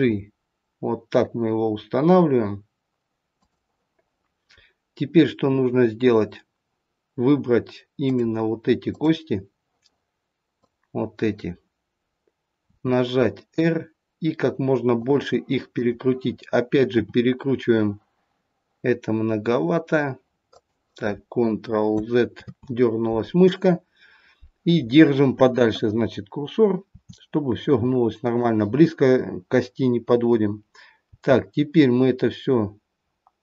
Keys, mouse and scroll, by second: 7.9 click, 10.4 click, 10.6 click, 12.5 r, 15.7 click, 17.0 r, 22.4 ctrl+z, 27.0 r, 31.0 g.